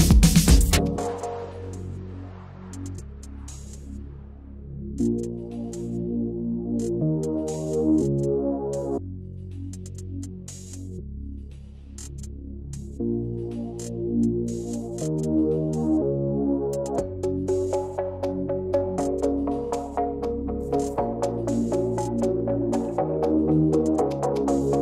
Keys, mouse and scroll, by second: 2.3 click, 2.9 click, 4.5 g, 7.9 click, 9.4 click, 9.6 click, 10.1 click, 13.7-16.4 middle drag, 16.4 click, 19.7 click, 22.6-24.7 middle drag, 24.7 click.